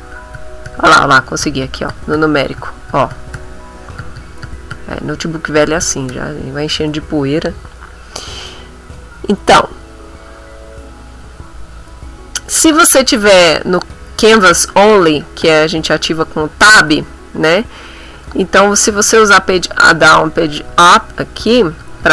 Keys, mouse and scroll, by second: 0.4 9, 1.4 KP_3, 2.6 KP_9, 5.5 KP_9, 15.4 Tab, 19.4-21.8 typing.